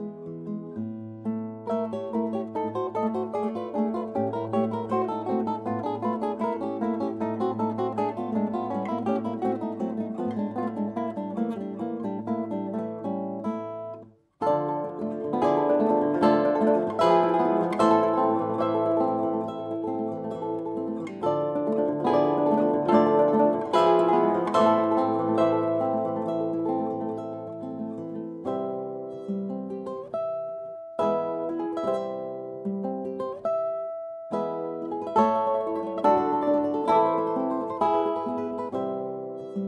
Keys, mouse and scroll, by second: 0.5 KP_1, 2.9 middle click, 10.6-16.2 right drag, 16.2 s, 19.9 s, 24.4-26.9 drag, 26.9-29.6 middle drag, 29.9 z, 31.2 middle click, 31.8 middle click, 32.1 middle click, 33.0 middle click.